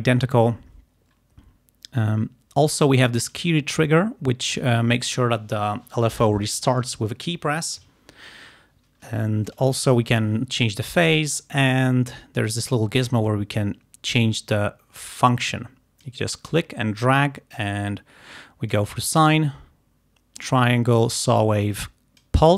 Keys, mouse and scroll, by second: 3.3 click, 9.5 click, 10.8 click, 13.3-16.3 drag, 16.5-19.0 drag, 19.3-22.5 drag.